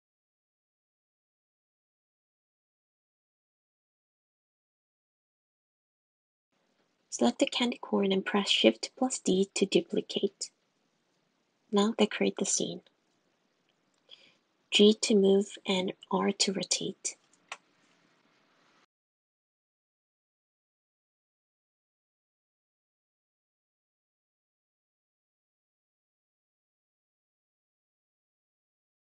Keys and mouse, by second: 3.9 click, 4.8 click, 5.3 click, 6.2 click, 8.8 g, 10.8-12.8 typing, 13.5 click, 14.0 click, 14.4 shift+d, 14.8 g, 16.4 g, 16.7 g, 18.3 shift+d, 18.5 r, 18.8 g, 21.3 r, 21.7 g, 26.4 shift+click, 27.0 shift+d, 27.2 g, 27.8 r, 28.6 g.